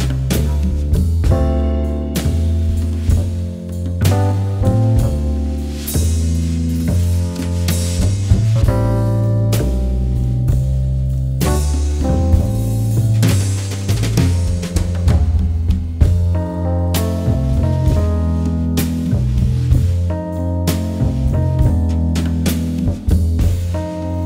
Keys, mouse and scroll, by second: 1.1 m, 1.2 alt+shift+click, 1.6 p, 2.0 click, 2.4 click, 2.5 shift+click, 3.0 v, 3.2 scroll up 1, 3.9 alt+scroll up 1, 4.3 click, 5.1 ctrl+z, 5.6 click, 5.7 v, 6.2 click, 7.4 ctrl+z, 7.8 shift+click, 8.8 alt+scroll up 1, 9.1 click, 9.2 alt+scroll down 1, 9.4 click, 10.1 alt+scroll up 1, 10.3 click, 11.0 click, 11.6 right click, 12.0-14.1 drag, 14.6 ctrl+z, 14.8 alt+click, 15.3 ctrl+d, 15.4 click, 15.8 shift+click, 17.1 shift+click, 17.3-19.6 alt+shift+drag, 19.6 ctrl+g, 20.2 click, 20.9 shift+click, 21.6 shift+click, 22.8 click, 22.9 shift+click, 23.3-24.2 shift+drag.